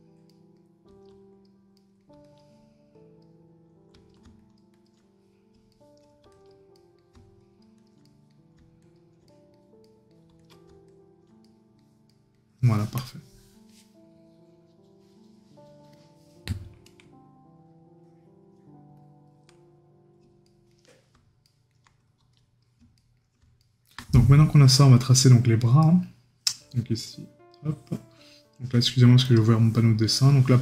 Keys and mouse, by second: 0.3 right click, 1.8 right click, 5.7 right click, 8.0 right click, 11.4 right click, 20.4 right click, 23.0 right click.